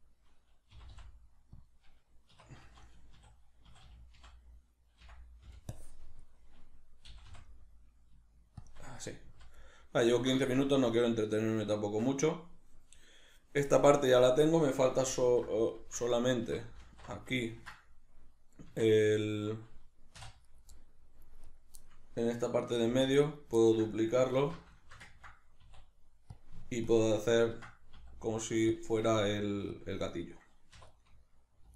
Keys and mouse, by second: 0.7 g, 1.7 click, 2.3 1, 8.7 shift+click, 9.3 z, 9.7-20.4 middle drag, 10.5 Tab, 15.2 alt+q, 16.8 alt+q, 18.6 Tab, 20.2 3, 20.4 right click, 20.7 middle click, 21.4 right click, 21.8-23.4 middle drag, 22.9 shift+d, 23.4 right click, 23.6-26.4 ctrl+middle drag, 24.4 alt+o, 25.7 e, 26.9-28.0 ctrl+drag, 28.0 s, 28.8 click, 29.1 g, 29.8 click, 30.7 2, 30.9 right click.